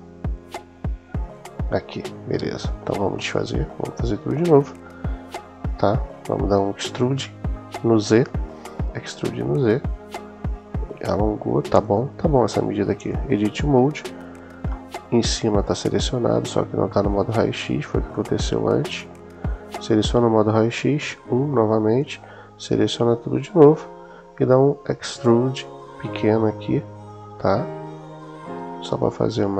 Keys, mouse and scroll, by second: 0.2 super+z, 0.7 super+z, 3.0 KP_1, 4.2 Tab, 7.9 s, 8.3 z, 11.6 click, 12.8 Tab, 14.5-15.5 middle drag, 17.9 middle click, 19.4 click, 20.8 KP_1, 21.8-23.4 drag, 24.2 s.